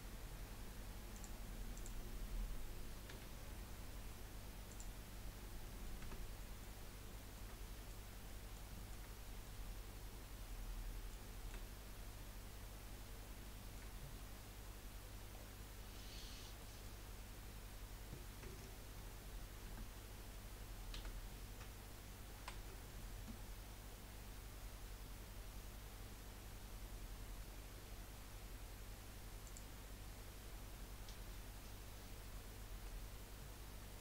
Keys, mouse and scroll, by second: 1.8 click, 3.2 g, 5.3 scroll down 1, 5.6 middle click, 6.0 Tab, 6.4 middle click, 6.8 scroll up 1, 7.1-12.0 shift+middle drag, 12.0-12.3 scroll up 2, 12.9 scroll up 3, 13.4-14.0 shift+middle drag, 14.0-14.7 scroll up 5, 15.3 scroll down 5, 15.9-17.6 middle drag, 17.6 scroll down 1, 17.7-19.7 scroll up 1, 19.7 Tab, 20.9 a, 22.4 ctrl+r, 29.8-30.4 scroll up 2, 32.8-34.0 middle drag.